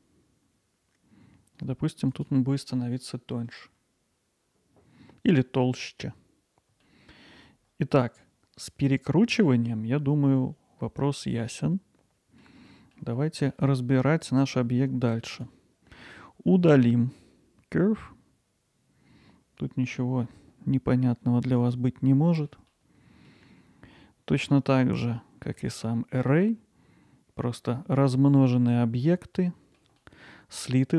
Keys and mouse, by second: 2.5-5.4 alt+middle drag, 6.8 alt+middle click, 9.5-12.4 alt+middle drag, 12.7 middle click, 13.2 alt+middle click, 13.8 middle click, 14.6 middle click, 21.6 click, 22.3 alt+middle click, 22.7-23.3 middle drag, 29.4 alt+middle click, 30.0 middle click.